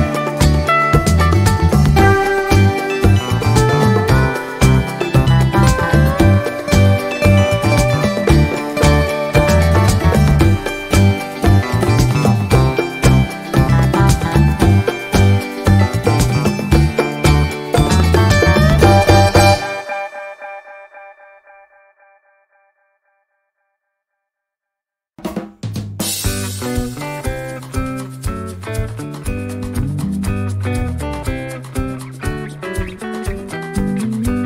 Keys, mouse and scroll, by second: 1.4 click, 2.7 click, 3.8-4.1 ctrl+scroll down 2, 4.8 ctrl+d, 5.3 ctrl+middle click, 5.5 scroll up 1, 5.7 middle click, 6.5 click, 7.6 click, 8.6 shift+click, 9.5-9.9 ctrl+shift+scroll up 4, 10.6 ctrl+d, 10.8-12.8 ctrl+drag, 12.8 click, 13.5-14.5 drag, 14.8-15.9 drag, 16.1 shift+click, 17.1 ctrl++, 18.1-19.8 drag, 20.3 click, 20.7 click, 21.7 click, 23.4 click, 23.9 click, 24.7 click, 27.0 click, 28.4 click, 30.0 click, 31.4 click, 32.3 click, 33.8 click.